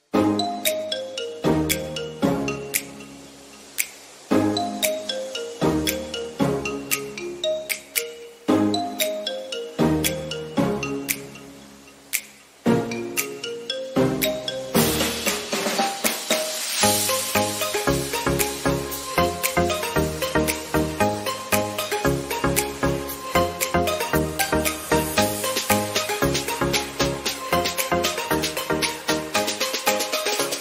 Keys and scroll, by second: 7.9 ctrl+0.